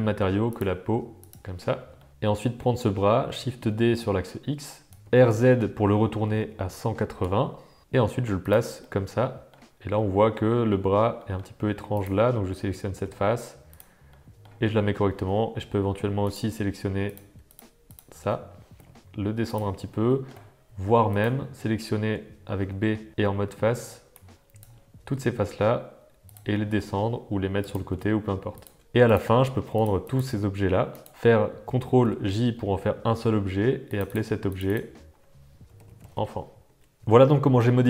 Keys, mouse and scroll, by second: 1.2 click, 1.8 Tab, 1.9 middle click, 3.4 shift+super+d, 5.4 r, 7.8 g, 8.5 Tab, 8.8 middle click, 9.9 middle click, 11.1 middle click, 11.9 click, 12.9 g, 14.2 middle click, 16.2 click, 17.4 shift+click, 17.8 shift+click, 18.7 g, 20.0 middle click, 21.1 click, 22.6 b, 23.6 b, 25.4 g, 26.5 g, 27.9 g, 28.6 Tab, 28.8 alt+a, 30.0 shift+click, 32.0 ctrl+j, 33.8 click, 34.0 click, 34.6-37.0 drag, 37.1 Tab, 37.1 click, 37.4 super+z, 37.5 alt+a, 37.5 click, 37.8 Tab, 37.8 click, 37.8 super+z, 37.8 Tab.